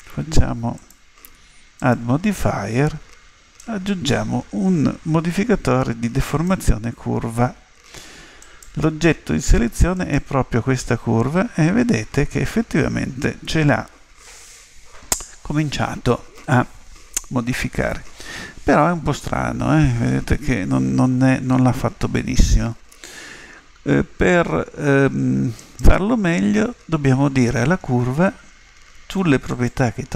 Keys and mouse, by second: 0.7-3.7 drag, 8.4 click, 12.6-25.6 middle drag, 25.6 right click, 29.5 click.